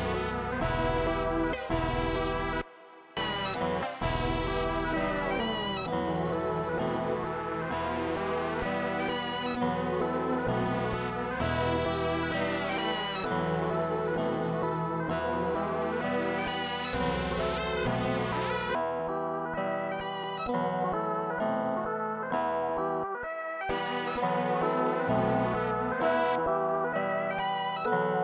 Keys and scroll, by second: 0.3 super+s, 1.2 super+s, 1.5-3.9 typing, 10.3 super+Up, 10.8 4, 11.9 super+s, 19.9 Return, 22.9 super+s, 23.6 s, 26.8 super+s.